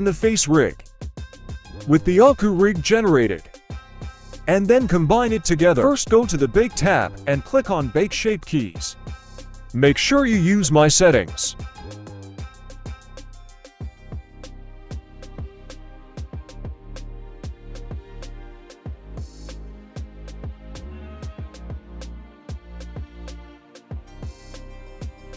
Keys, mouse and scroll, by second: 0.2-0.6 scroll down 1, 0.6-2.8 middle drag, 4.9-20.8 drag, 22.3-23.2 middle drag, 23.8-24.1 middle drag, 24.4 right click, 24.8 right click.